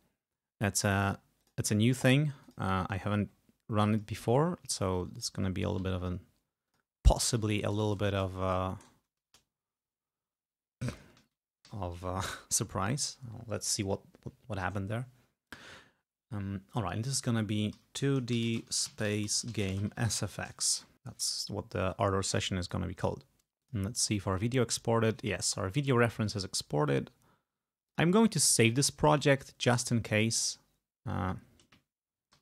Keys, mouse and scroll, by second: 1.4 click, 2.5 click, 3.1-3.5 scroll down 2, 4.0 click, 5.2 click, 5.8 ctrl+v, 7.8 BackSpace, 9.3 Return, 11.0 ctrl+click, 11.7 ctrl+a, 17.8-20.8 typing, 22.0-23.0 drag, 23.7-25.0 drag, 27.9 click, 28.7 click, 32.0-32.4 typing.